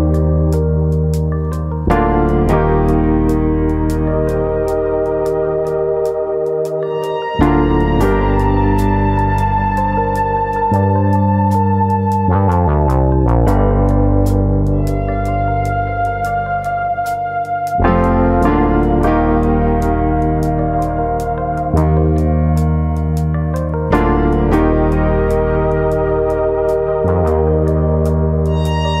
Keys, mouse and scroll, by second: 7.7-8.4 scroll up 6, 8.1 shift+middle click, 8.4 middle click, 8.7 scroll up 1, 8.9 shift+middle click, 9.2 click, 9.5 Tab, 9.8 middle click, 10.1-10.4 scroll up 1, 10.5 middle click, 11.8 3, 12.2 click, 12.7 shift+click, 15.3 shift+d, 17.0 p, 18.1 Tab, 18.7 click, 18.9 click, 19.8 KP_3, 20.6 shift+middle click, 21.5 click, 21.8-22.3 scroll up 4, 22.0 shift+middle click, 23.3 Tab, 23.6 a, 24.5 e, 25.3 click, 25.8 click, 26.9 r, 27.5 click, 28.0 ctrl+z, 28.2 ctrl+z, 28.5 ctrl+z.